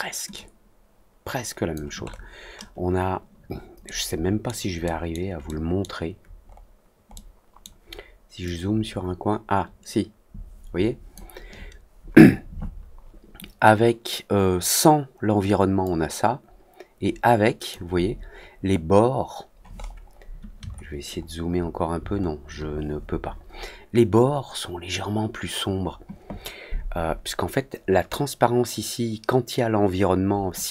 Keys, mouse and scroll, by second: 0.3-1.7 drag, 2.0 middle click, 2.0-2.6 scroll down 2, 2.4 middle click, 3.8 middle click, 3.8-4.4 scroll down 1, 4.8 middle click, 4.8 scroll down 1, 5.4 middle click, 5.4-5.7 scroll down 1, 6.4 middle click, 7.1 middle click, 8.4-11.1 drag, 15.7-17.6 drag, 19.7 middle click, 20.6 alt+middle click, 21.1 alt+middle click, 22.1 alt+middle click.